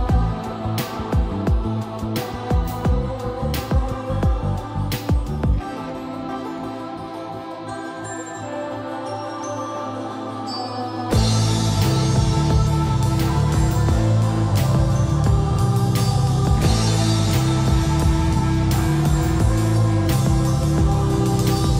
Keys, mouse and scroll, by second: 0.6-1.8 typing, 3.7 shift+middle click, 4.4 scroll up 1, 4.7-5.7 typing, 5.7 click, 6.9 typing, 7.1 click, 8.4 typing, 8.9 click, 9.9 scroll down 1, 10.2 middle click, 11.1 scroll up 1, 11.9-14.2 typing, 13.0 Escape, 15.3-16.5 typing, 17.1 click, 17.6-21.2 typing, 21.3 click.